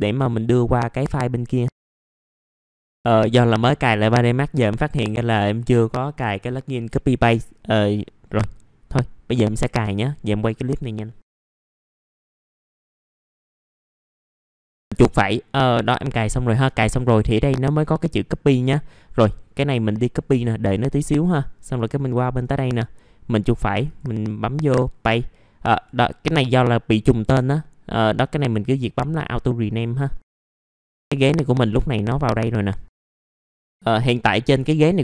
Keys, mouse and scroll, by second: 1.9-14.6 drag, 15.0 right click, 16.7 click, 17.5-18.6 right drag, 20.0 click, 23.3 right click, 28.1 1, 29.3 click, 30.7 middle click, 30.8 scroll down 1, 31.1 alt+middle click, 31.6 middle click, 31.7 scroll down 1, 32.0 alt+middle click, 33.0 click, 33.3-33.7 scroll up 1, 34.0-34.7 scroll down 1, 34.7 middle click.